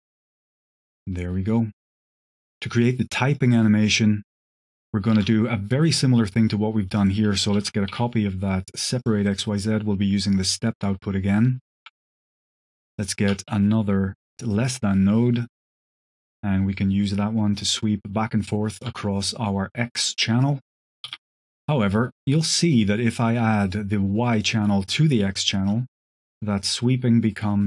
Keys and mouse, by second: 1.9 shift+click, 2.5 g, 3.0-3.4 middle drag, 4.2 click, 5.1 alt+a, 6.8 click, 7.4 ctrl+shift+d, 7.8 y, 8.9 click, 9.1 click, 11.6 ctrl+shift+click, 12.1 click, 12.8 click, 13.2 shift+d, 13.8 drag, 14.4 click, 15.9-18.7 shift+drag, 19.0 click, 19.9 click, 20.3 click, 20.9 q, 23.0-24.4 drag, 25.6-27.6 shift+drag.